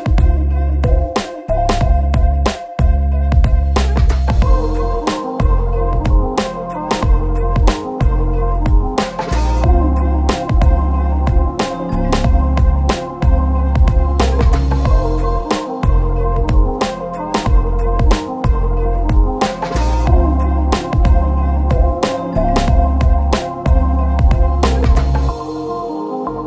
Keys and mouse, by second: 0.2 g, 0.9 h, 1.3 Tab, 1.4 Tab, 1.6 q, 2.5 click, 2.5 q, 2.8 Tab, 2.9 Tab, 3.0 alt+click, 3.1 middle click, 3.1 Tab, 3.3 alt+shift+click, 3.7 middle click, 4.1 alt+shift+click, 4.3 ctrl+z, 4.3 ctrl+alt+shift+click, 5.0 n, 7.5 KP_1, 7.9 Tab, 8.1 Tab, 8.5 Tab, 8.8 middle click, 8.8 shift+click, 9.0 middle click, 9.6 shift+click, 9.8 Tab, 9.8 middle click, 10.6 middle click, 11.2 click, 11.3 shift+click, 11.8 click, 12.0-14.3 typing, 12.3 middle click, 13.0 ctrl+shift+z, 13.3 Tab, 13.3 alt+s, 17.3 click, 17.3 middle click, 17.3 right click, 17.3-19.3 typing, 18.3 shift+click, 19.0 ctrl+middle click, 19.6 shift+click, 19.8 click, 20.3 shift+click, 20.4 shift+d, 20.7 shift+click, 21.1 shift+click, 21.3 shift+d, 21.8 shift+z, 22.9 ctrl+shift+j, 23.2 KP_Divide, 23.4 ctrl+shift+click, 23.9 h, 24.2-25.5 drag, 24.2 q, 24.6 Tab, 24.8 Tab, 25.9 alt+Tab, 25.9 alt+shift+click, 26.0 alt+Tab, 26.3 alt+Tab, 26.3 alt+click.